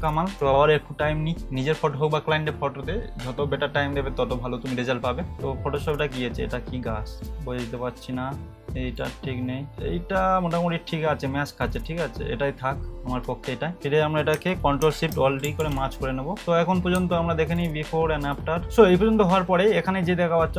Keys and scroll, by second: 15.4 ctrl+alt+shift+e.